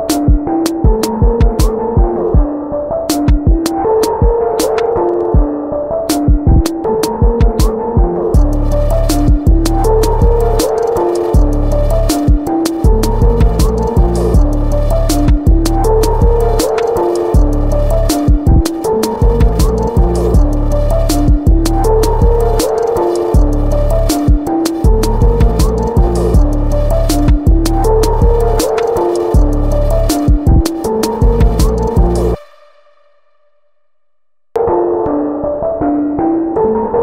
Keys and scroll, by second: 7.9-9.6 typing, 17.3 b, 19.2 ctrl+z, 20.7 ctrl+t, 25.7 Return, 27.2 b, 32.8 v, 33.2 ctrl+c, 33.6 ctrl+v, 34.4 ctrl+shift+], 34.7 typing, 36.9 Return.